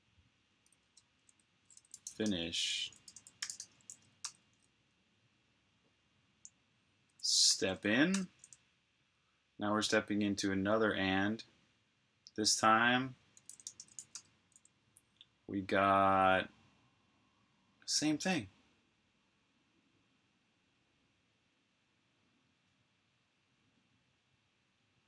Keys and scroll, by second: 0.8 super+Tab, 1.4-4.6 typing, 7.4 s, 8.0 Return, 13.9 typing.